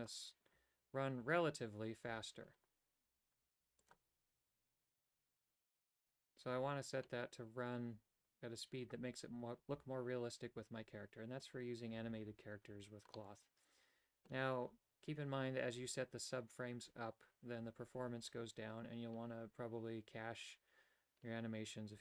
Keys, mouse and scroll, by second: 3.9 click, 13.2-14.4 middle drag.